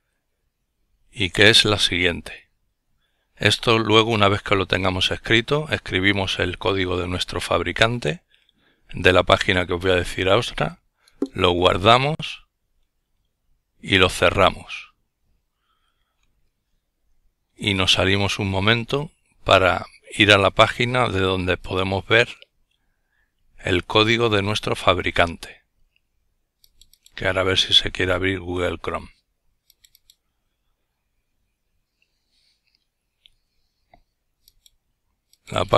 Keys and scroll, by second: 13.0 F12.